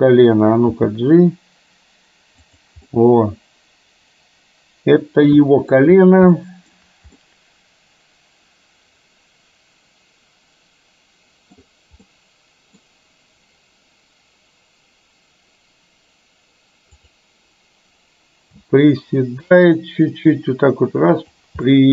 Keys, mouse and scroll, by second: 0.9 g, 2.9-5.9 middle drag, 6.5 shift+middle click, 7.3-11.6 middle drag, 12.1 scroll up 1, 12.3-12.9 middle drag, 19.4 g, 21.8-21.9 middle drag.